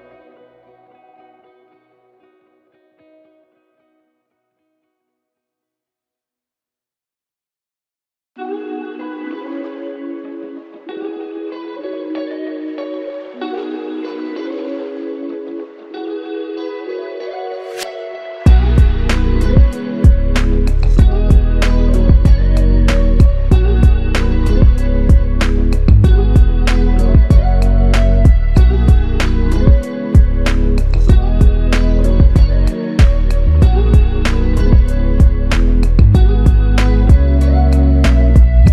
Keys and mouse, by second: 1.1 alt+click, 4.0 alt+click, 8.9 ctrl+click, 15.9 alt+click, 20.8 alt+click, 22.9 alt+click, 29.3 alt+click, 30.5 double click, 38.5 alt+click.